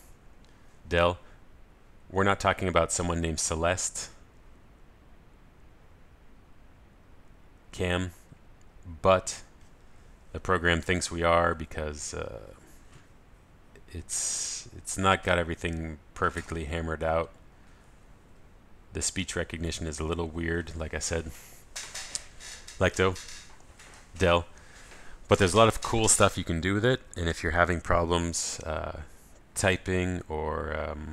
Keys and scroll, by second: 0.3 ctrl+alt+shift+super+a, 23.8 ctrl+alt+shift+super+a.